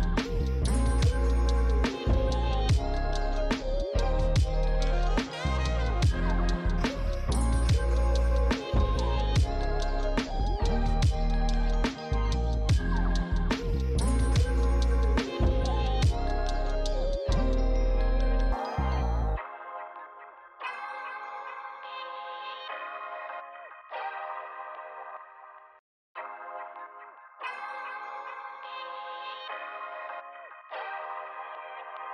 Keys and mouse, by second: 0.4 alt+shift+click, 1.4 click, 1.9 shift+click, 3.7 click, 4.5 shift+d, 4.6 right click, 4.9 click, 5.7 Tab, 5.8 click, 7.2 Tab, 7.4 a, 8.0 alt+s, 8.6 click, 8.9 Tab, 9.0 click, 9.1 Tab, 9.4 a, 9.8 alt+s, 12.2 Tab, 12.3 click, 14.3 f, 14.4 click, 14.9 f, 15.0 click, 15.4 f, 15.6 click, 16.7 f, 16.9 click, 17.1 f, 18.1 click, 18.1 click, 19.5 alt+q, 19.6 alt+click, 20.5 shift+click, 21.7 f, 21.7 click, 21.9 f, 21.9 click, 22.3 f, 23.1 f, 23.1 click, 24.5 click, 30.7 click, 31.2 Tab, 31.5 click.